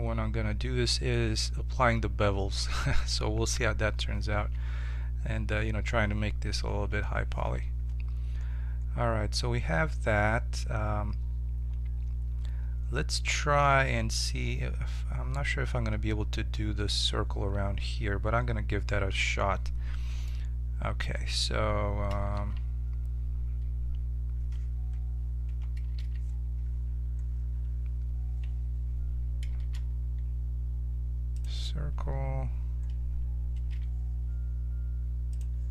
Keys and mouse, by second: 4.3 z, 6.6 KP_7, 7.4 z, 8.1-10.6 middle drag, 20.3-22.3 middle drag, 22.3 z, 22.9 middle click, 25.4 KP_7, 25.9 z, 29.6 shift+a, 33.7 g.